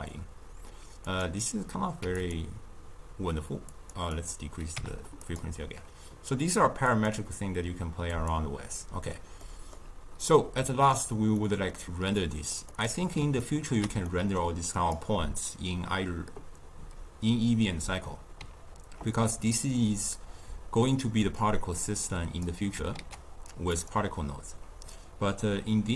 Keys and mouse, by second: 1.1-2.4 drag, 3.8 click, 4.2-5.5 drag, 6.9-8.8 drag, 8.8-10.2 middle drag, 10.2-11.4 drag, 11.4-12.2 middle drag, 12.2 click, 13.4-14.7 ctrl+middle drag, 14.7 click, 22.0 click, 23.0 ctrl+a.